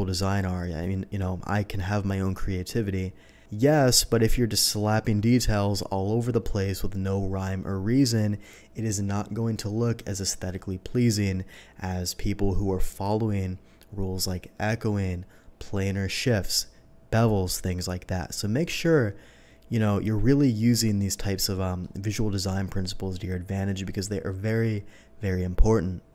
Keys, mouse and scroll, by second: 20.9-21.7 middle drag, 21.2 typing.